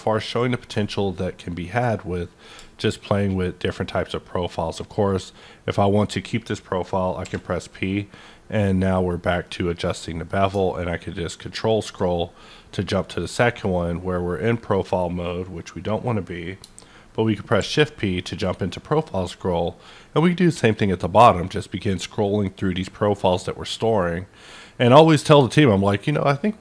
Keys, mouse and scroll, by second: 0.0-0.5 ctrl+scroll down 1, 1.0 scroll up 1, 7.2 scroll up 1, 7.2 p, 9.8 middle click, 11.6-12.0 ctrl+scroll down 1, 12.0-14.5 middle drag, 16.6 middle click, 16.6-17.1 ctrl+scroll down 1, 17.6 shift+p, 18.2-20.5 middle drag, 19.6-20.5 scroll up 1, 20.5-21.1 scroll up 2, 22.2-22.7 scroll up 1, 23.3-24.1 scroll up 1, 24.1-25.2 scroll up 1, 25.2-25.7 scroll down 1.